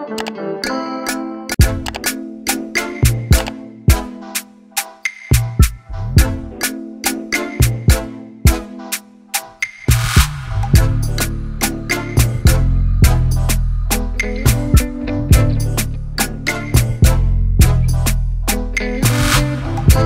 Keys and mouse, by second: 0.3 Return, 2.2 click, 2.8 click, 3.4 click, 3.9 click, 4.5 click, 5.3 click, 7.8 click, 9.3 click, 10.1 click, 12.1 click, 12.7 ctrl+z, 14.4-15.8 drag, 16.3 click, 17.2 click.